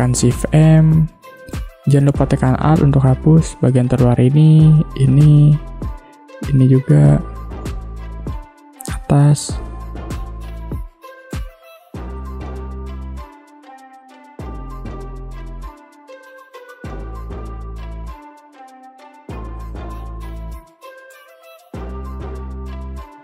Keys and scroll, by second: 0.4 shift+m, 7.8 space, 12.5 space, 14.0 ctrl+z, 16.3 space, 19.9 space.